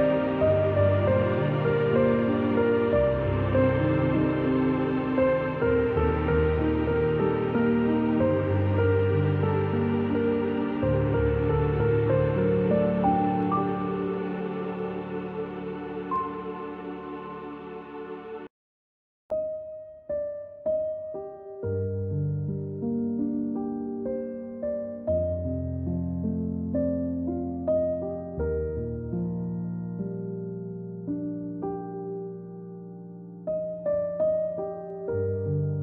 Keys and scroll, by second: 2.8 -, 5.5 v, 7.7 g, 11.8-14.3 typing, 18.9 v, 20.3 space, 20.9 space, 21.1 space, 21.9 g, 27.0-29.0 typing, 33.8 -.